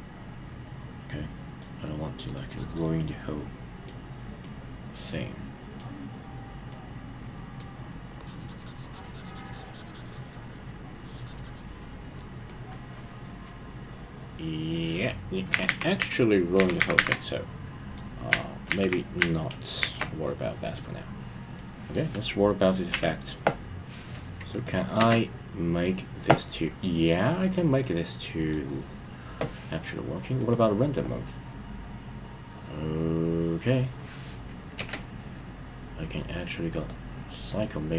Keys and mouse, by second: 2.3 click, 3.0 middle click, 4.4-5.8 middle drag, 6.7 middle click, 8.2 click, 12.5-14.9 middle drag, 15.6 super+z, 16.0 super+z, 17.3-18.0 middle drag, 20.4-20.8 shift+super+middle drag, 21.5-21.9 shift+super+middle drag, 22.9 KP_1, 24.5 click, 24.9 space, 27.8-28.5 middle drag, 30.3 click, 34.8 space, 36.8-37.9 drag.